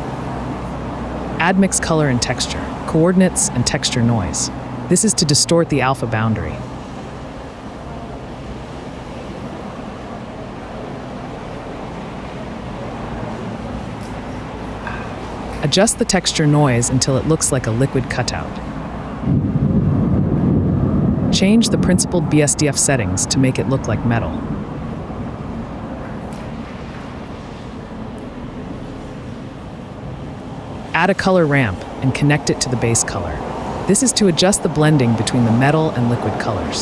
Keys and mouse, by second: 0.8 click, 2.7 shift+a, 6.0 click, 7.0 shift+d, 7.2 y, 8.2 shift+a, 14.3 click, 15.3 click, 23.3-25.6 drag, 26.1 click, 26.9-30.0 drag, 30.8 click, 31.1 shift+a, 33.5 click, 36.2 click.